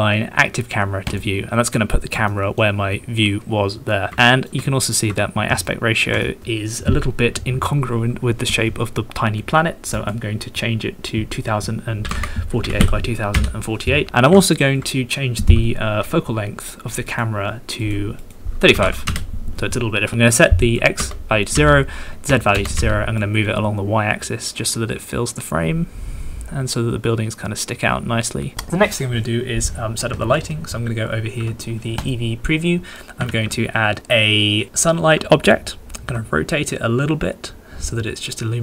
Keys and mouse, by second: 2.3 shift+click, 4.2 ctrl+click, 4.6 shift+click, 5.7 ctrl+click, 6.2 shift+click, 9.9 click, 11.1-13.4 drag, 14.1 ctrl+click, 14.4 shift+click, 17.1 click, 17.8 click, 18.2 click, 20.8 click, 22.4 click, 23.3-28.5 drag, 33.3 shift+a, 36.0 r.